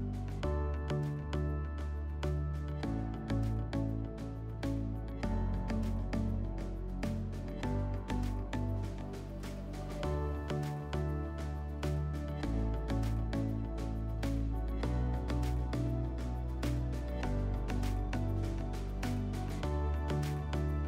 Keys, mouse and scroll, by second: 11.4 click, 12.8 F4, 14.8 click, 16.7 click.